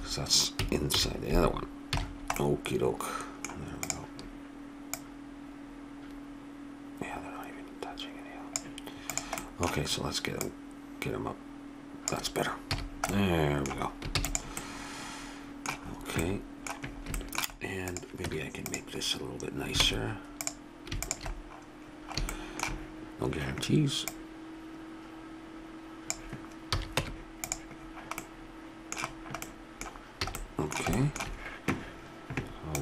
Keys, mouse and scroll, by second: 0.9 alt+h, 1.9 a, 3.9 right click, 4.4-6.7 drag, 9.1-12.4 drag, 12.7 a, 14.1 ctrl+s, 17.9-19.0 right drag, 18.3 Tab, 19.8 ctrl+Tab, 24.0-25.8 drag, 26.7 a, 27.0 Tab, 30.3 a.